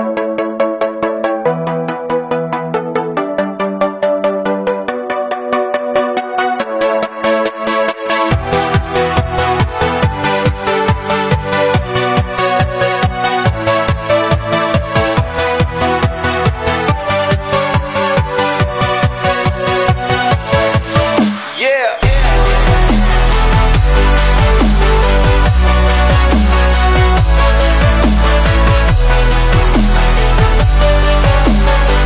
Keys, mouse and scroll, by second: 0.2 scroll up 1, 0.5 shift+middle drag, 0.6 scroll down 1, 0.7-1.6 middle drag, 1.8 scroll down 1, 2.0-2.6 middle drag, 2.6 scroll down 2, 2.8-3.1 middle drag, 3.1 scroll up 1, 3.4 click, 6.6-7.3 middle drag, 7.3 s, 9.2-10.5 drag, 10.5 s, 12.2 click, 12.8 click, 13.1-13.4 middle drag, 13.4-14.1 drag, 15.4 middle click, 16.1 click, 16.5-17.1 middle drag, 17.1 s, 18.1 click, 18.7-19.4 middle drag, 19.4 shift+d, 20.0-22.2 drag, 21.0 s, 22.2-22.9 middle drag, 22.9-23.6 drag, 23.6 middle click, 23.6-26.1 drag, 24.1 s, 26.3-26.8 middle drag, 26.8 scroll down 1, 27.0 shift+middle click, 27.4 scroll up 1, 27.6-28.2 middle drag, 28.2 scroll up 1, 28.4-28.8 middle drag, 28.8 scroll down 1, 29.0-30.7 drag, 30.8 middle drag, 31.1 drag, 31.3-31.9 middle drag, 31.9-32.0 drag.